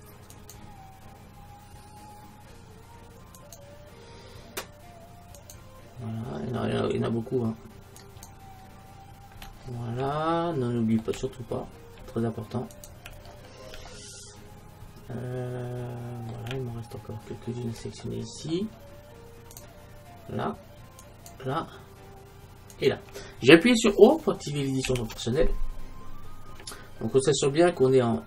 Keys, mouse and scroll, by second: 5.4-7.2 right drag, 8.0-9.8 right drag, 10.1 middle click, 12.8-14.7 middle drag, 12.8-14.7 right drag, 16.8 middle click, 17.4 middle click, 19.6-24.6 right drag, 24.9 q.